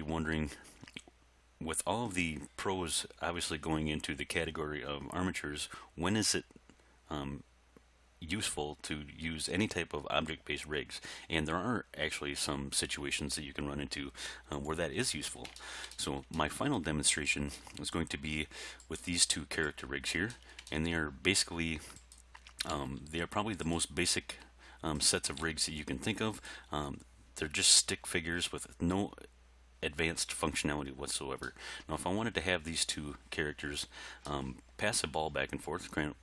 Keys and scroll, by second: 22.8 r, 25.4 r.